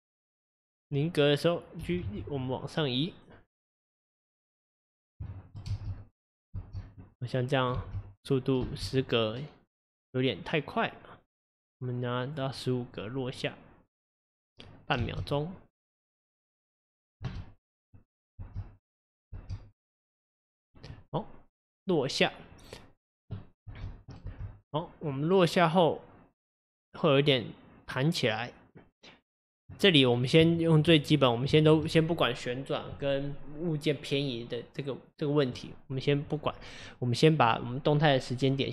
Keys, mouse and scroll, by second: 1.8 g, 4.6-5.2 scroll down 3, 5.2 shift+middle click, 5.7 space, 6.6 space, 7.2 click, 7.8 space, 8.7 space, 9.1-12.3 drag, 12.5-15.0 drag, 15.0 space, 15.9 click, 17.2 space, 17.9 click, 18.4 space, 19.3 space, 19.8-23.6 drag, 23.6 space, 24.3 space, 25.1-28.1 drag, 30.1-30.6 scroll up 3, 30.6 shift+middle click, 31.0-31.5 scroll up 1, 31.5-38.7 shift+middle drag.